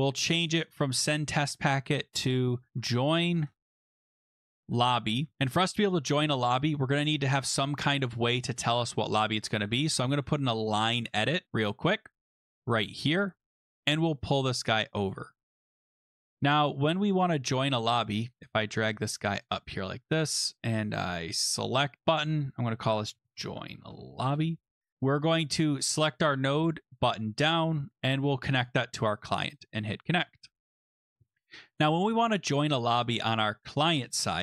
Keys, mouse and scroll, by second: 0.4 click, 1.3 click, 2.4-5.2 typing, 5.4 click, 7.0 right click, 7.5 click, 9.4-11.6 typing, 12.7 typing, 13.6 click, 15.0 click, 16.1 click, 19.4 click, 20.1 click, 22.0 click, 22.0 click, 22.2 click, 22.9 ctrl+a, 22.9-24.6 typing, 25.9 click, 26.8 l, 27.0 click, 27.2 click, 28.6 click, 29.5 click, 30.7 click, 32.8 click, 33.7 click.